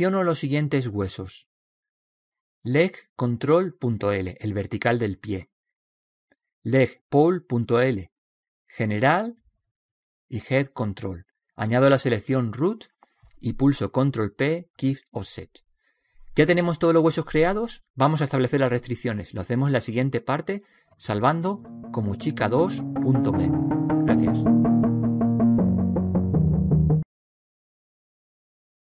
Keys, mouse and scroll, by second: 2.6-3.4 scroll down 1, 3.4 middle click, 3.5 right click, 5.1-9.2 middle drag, 6.2 right click, 9.2-12.3 right drag, 12.7 right click, 14.8-18.6 right drag, 15.6 middle click, 17.1 middle click, 17.9 ctrl+p, 20.1-22.4 middle drag, 26.2 click.